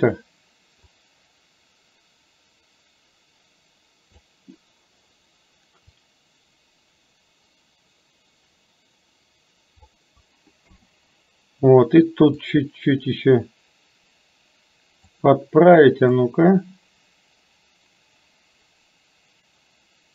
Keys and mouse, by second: 1.0 click, 1.9-4.3 drag, 6.1-10.0 drag, 10.7 KP_7, 12.7-15.2 drag, 16.2-20.1 drag.